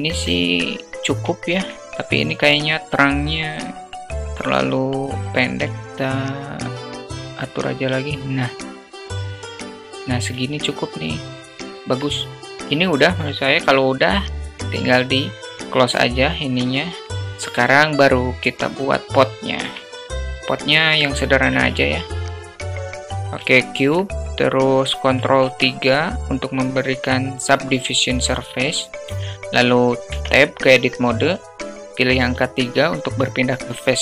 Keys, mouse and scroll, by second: 0.7 alt+middle drag, 1.7 middle click, 2.8-4.8 drag, 7.2-10.0 drag, 10.8-12.3 alt+middle drag, 17.6 click, 18.6-19.2 drag, 21.4-21.7 shift+middle drag, 21.9 shift+a, 23.6-24.0 middle drag, 24.2 click, 25.7 ctrl+3, 30.4 Tab, 32.4 3.